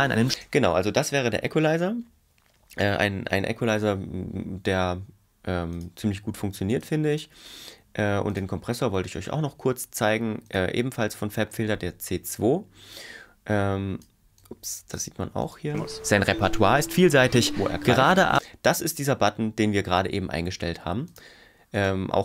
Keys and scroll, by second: 0.3 space, 15.7 space, 18.4 space.